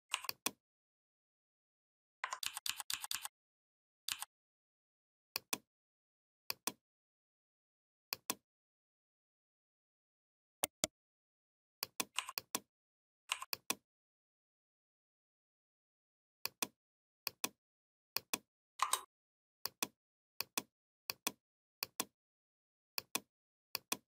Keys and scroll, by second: 2.2 ctrl+d, 3.9 ctrl+d.